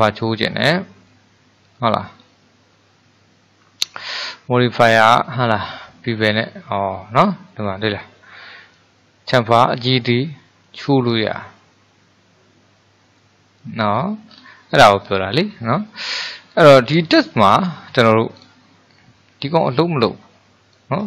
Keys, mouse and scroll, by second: 0.6-3.6 middle drag, 4.1-6.6 drag, 6.6-8.8 middle drag, 8.8-11.9 drag, 14.3-14.8 scroll down 2, 14.8-16.1 middle drag, 16.1 click, 17.6 Delete, 18.4 click, 20.1-21.0 drag.